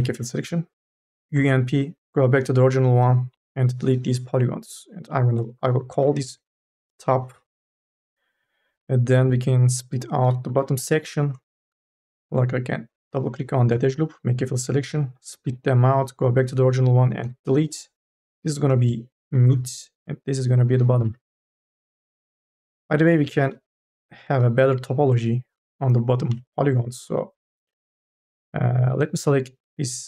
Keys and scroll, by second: 0.2 f, 1.2 u, 1.6 p, 3.2 Delete, 6.2 t, 6.4 o, 6.5 p, 7.5 Return, 10.3 2, 11.3 q, 13.7 u, 14.1 f, 15.6 p, 17.1 Delete, 18.5 m, 18.7 :, 19.1 d, 19.4 Return, 20.9-21.6 typing, 21.9 Return, 26.0 u, 26.5 n.